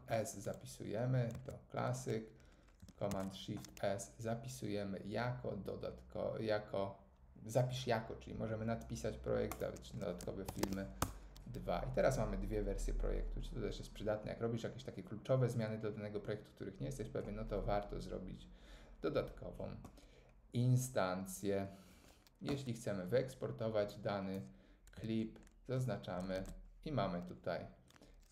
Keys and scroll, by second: 1.3 super+s, 3.1 shift+super+s, 10.2-11.1 typing, 22.5 Tab, 26.4 shift+super+r.